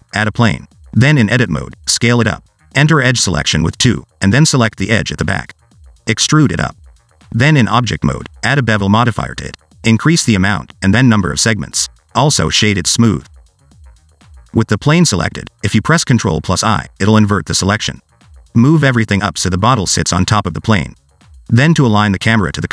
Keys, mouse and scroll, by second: 1.4 scroll down 2, 1.6 middle click, 1.8 s, 3.0 scroll down 2, 3.2 middle click, 3.5 Tab, 4.6 2, 5.5 click, 6.3 e, 7.6 Tab, 8.2 click, 11.0 click, 12.2 click, 13.4 right click, 14.1 middle click, 15.4-16.1 scroll up 2, 16.6 ctrl+i, 18.0 click, 21.5 middle click, 22.3 middle click.